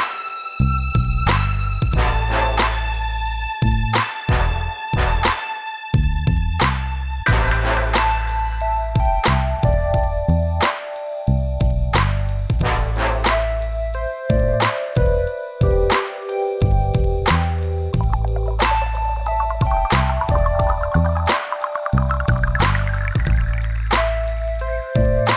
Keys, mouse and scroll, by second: 1.8 shift+Return, 2.8 click, 4.3 click, 5.6 click, 7.2 click, 8.6 click, 9.6 click, 9.7 click, 10.7 click, 14.8 alt+f, 16.1 click, 18.0 click, 18.2 click, 18.6 f, 19.4 scroll up 1, 20.8 click, 21.5 scroll up 2, 23.3 click.